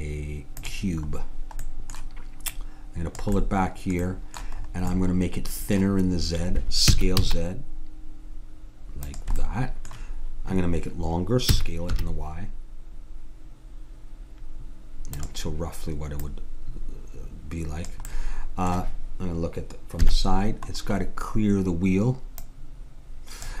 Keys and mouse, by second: 2.5-4.3 drag, 4.3 middle click, 6.9 s, 9.5-11.5 drag, 11.5 s, 16.3-18.1 drag, 18.1-19.7 middle drag, 20.0 KP_3, 22.5-23.6 drag.